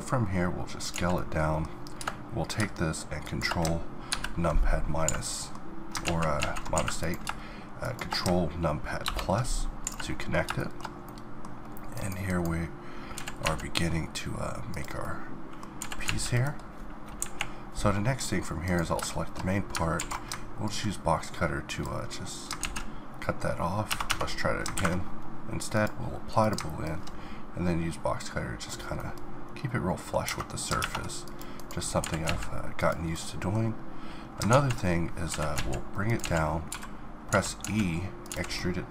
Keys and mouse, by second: 0.4 middle click, 0.9 z, 1.9-4.1 middle drag, 4.1 ctrl+KP_Subtract, 5.0 a, 6.0 ctrl+z, 6.5 ctrl+z, 6.7 a, 9.0 ctrl+KP_Add, 9.8 a, 10.8-11.9 middle drag, 11.9-13.1 right drag, 13.1 g, 14.0 click, 14.1-15.8 middle drag, 15.8 g, 17.2 KP_1, 18.6-20.0 drag, 20.0 alt+w, 20.8 alt+w, 22.6 ctrl+z, 23.5 ctrl+z, 23.9 Tab, 24.3 Tab, 30.3 Tab, 30.8 ctrl+Tab, 32.0 g, 32.8 click, 33.0-34.5 middle drag, 34.5 ctrl+z, 35.3 g, 36.0 click, 36.2 z, 36.7 e, 38.3 z, 38.7-38.9 middle drag.